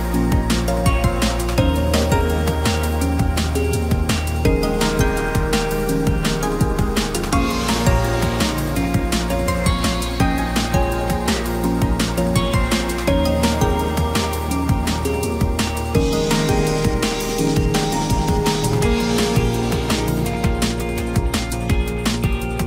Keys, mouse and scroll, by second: 7.2 ctrl+t, 12.9 right click.